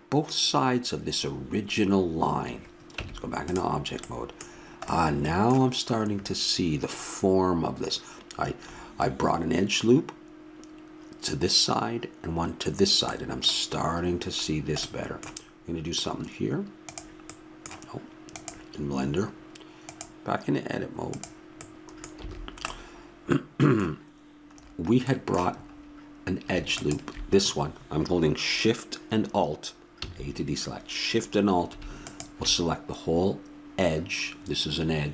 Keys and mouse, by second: 3.0 Tab, 4.0 middle click, 4.2-6.5 middle drag, 19.9-21.6 drag, 21.6 middle click, 22.2 a, 22.7-24.6 middle drag, 26.8-28.5 drag, 30.0 a, 32.0-33.8 drag.